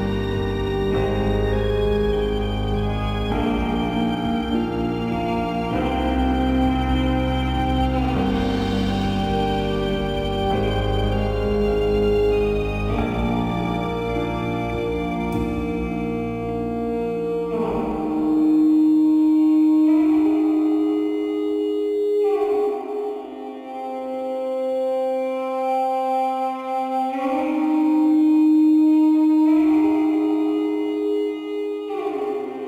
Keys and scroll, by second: 5.3 space, 29.9 shift+d, 31.1 BackSpace.